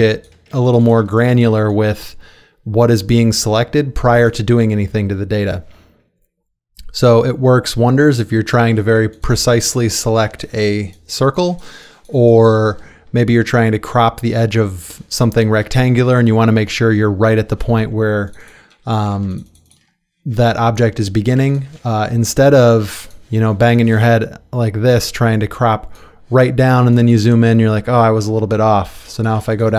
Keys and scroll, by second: 0.3 space, 9.0 space, 15.6 space, 19.1 ctrl+space, 21.3 ctrl+space, 26.8 space, 29.3 space.